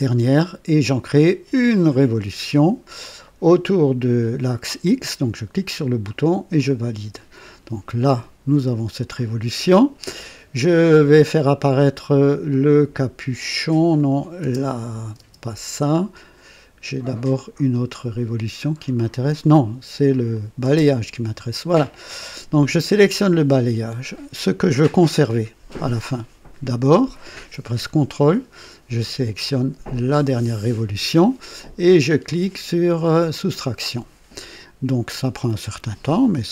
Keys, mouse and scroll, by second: 2.1 click, 5.3 click, 6.5 click, 13.9 click, 14.4 space, 15.1 space, 20.2 click, 20.6 space, 20.6 space, 29.8 ctrl+click, 33.2 click, 36.0-36.5 drag.